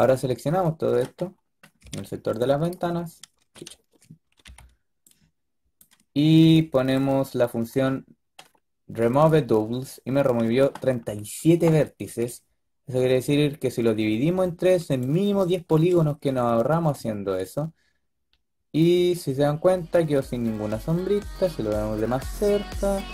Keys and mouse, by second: 1.7 ctrl+b, 2.7-4.3 drag, 3.6 ctrl+z, 4.3 b, 6.3 b, 8.5-10.9 drag, 15.4-16.5 drag, 16.5-18.3 middle drag.